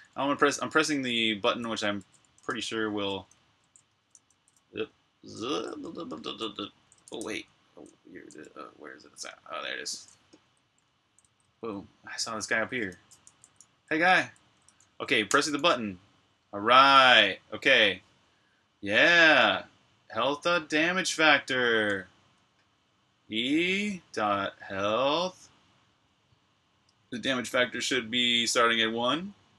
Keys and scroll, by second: 0.0-11.0 typing, 12.2-16.4 typing.